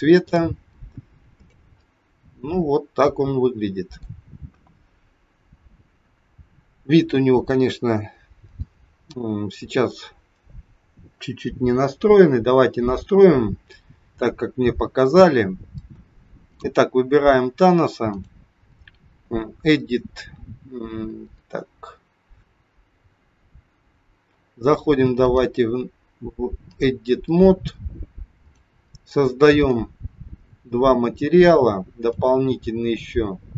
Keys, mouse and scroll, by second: 0.2 click, 1.4 click, 2.7 middle click, 4.4 KP_1, 16.5 click, 18.0 click, 25.1 click, 28.4 click, 29.5 click, 30.5 click, 32.0 click.